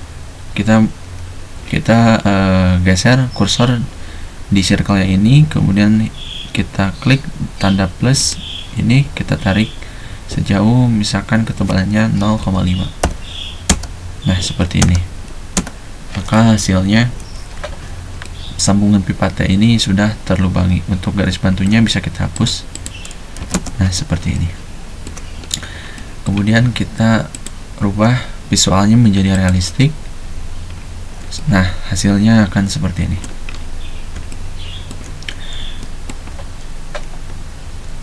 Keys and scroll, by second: 12.3-13.7 typing, 14.8 space, 15.6 space, 17.2 F7, 23.4 e.